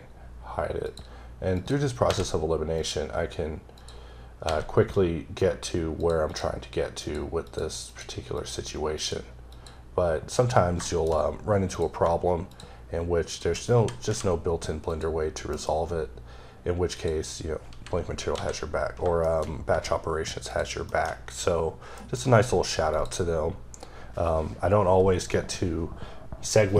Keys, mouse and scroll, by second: 0.6 click, 1.4 click, 1.9 h, 2.6 click, 3.6 click, 4.3 h, 4.5-4.9 scroll down 3, 4.9-5.3 scroll up 1, 5.8 click, 6.1 double click, 6.8 click, 7.3 click, 7.7 click, 8.2 click, 8.8 click, 9.3 click, 10.2-10.7 scroll up 3, 10.7 shift+middle click, 11.5 click, 13.1 double click, 13.9 h, 14.7 click, 15.3 m, 16.7 click, 17.5 h, 19.1 shift+middle click, 19.3-19.9 scroll up 3, 20.3 shift+click, 20.7 shift+middle click, 20.9-21.8 shift+scroll up 3, 21.8 m, 22.7 click.